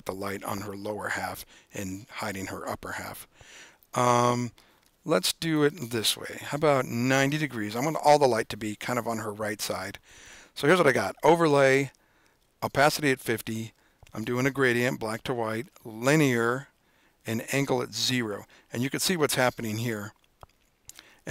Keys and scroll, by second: 6.0-6.8 typing.